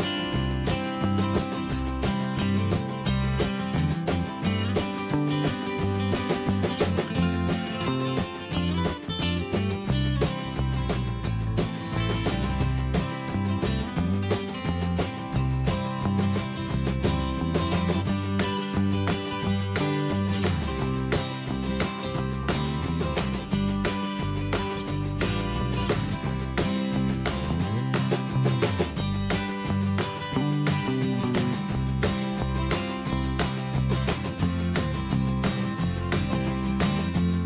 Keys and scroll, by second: 3.0 alt+Tab, 7.1 ctrl+c, 8.5 Escape, 34.9 Escape.